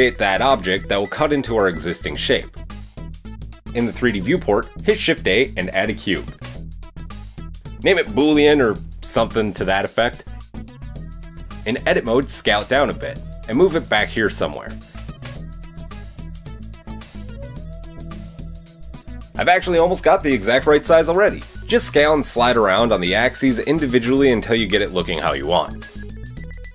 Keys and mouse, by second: 4.0-4.5 middle drag, 4.7 shift+a, 6.6-13.5 drag, 7.7 middle click, 9.3 o, 11.4 KP_1, 11.4 KP_3, 11.5 Tab, 12.4 s, 13.5-15.3 middle drag, 13.5 g, 15.3 g, 20.1-23.0 middle drag, 21.4 g, 23.3-26.7 middle drag, 25.6 Tab.